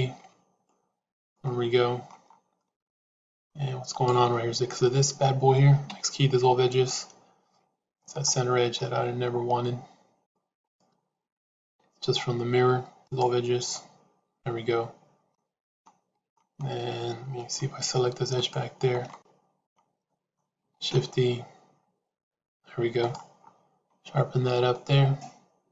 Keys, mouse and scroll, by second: 1.3 middle click, 2.6 middle click, 3.8 click, 5.8 x, 8.8-10.2 middle drag, 10.5 click, 11.5 x, 13.6-15.2 middle drag, 15.6 middle click, 17.3 middle click, 19.0 middle click, 20.0 middle click, 20.7 shift+e, 24.6-25.7 middle drag.